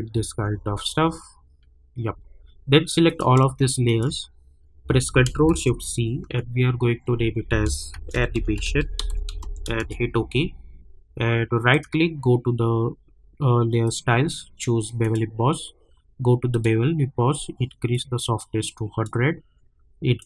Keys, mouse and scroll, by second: 0.1 space, 3.0 click, 5.5 ctrl+shift+c, 7.7-9.9 typing, 11.7 right click, 13.8-20.2 drag.